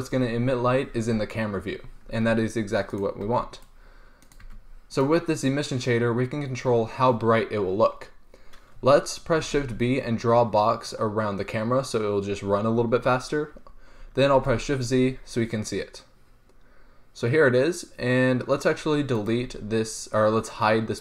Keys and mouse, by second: 3.0 right click, 3.1-3.9 drag, 3.5 g, 4.6 g, 9.6 shift+b, 14.7 shift+z, 20.3-21.0 right drag.